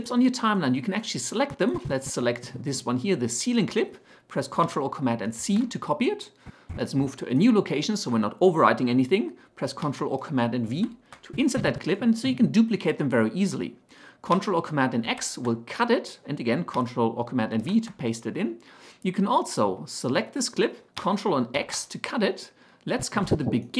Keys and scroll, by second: 5.5 ctrl+c, 10.8 ctrl+v, 15.1 ctrl+x, 17.6 ctrl+v, 21.6 ctrl+x.